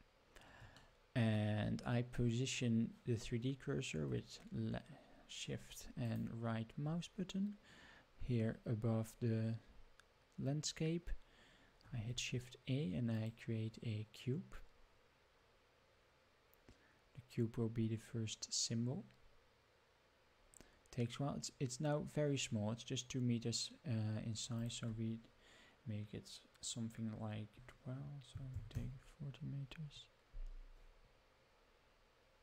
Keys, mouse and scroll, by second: 1.0-1.4 shift+middle drag, 6.1 shift+right click, 8.2-8.5 scroll up 3, 11.9 shift+a, 24.6-28.2 drag, 27.5-28.1 scroll down 5, 30.9-32.4 drag.